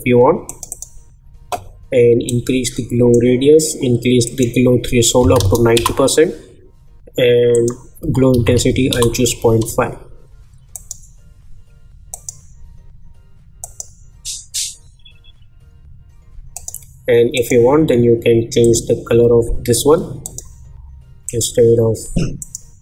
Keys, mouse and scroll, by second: 0.4-4.2 drag, 5.7 Return, 7.5 click, 8.9 Return, 10.7 click, 16.5 click.